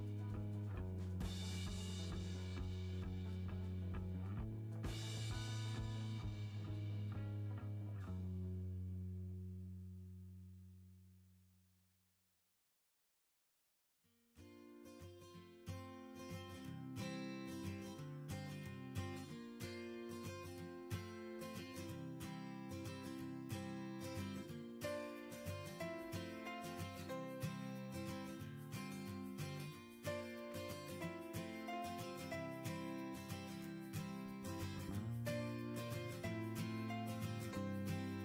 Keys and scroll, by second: 3.2 Delete.